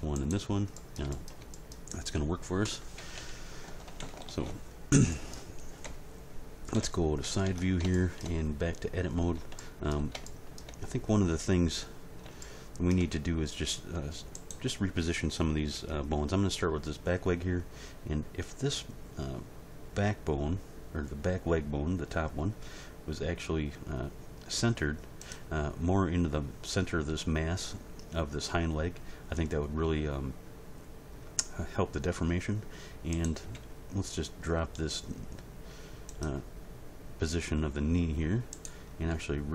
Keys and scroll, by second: 3.0 a, 3.8 alt+r, 4.0 alt+g, 4.2 alt+s, 5.8 End, 6.7 Page_Down, 7.4 Tab, 22.8 g, 33.6 g, 39.1 g.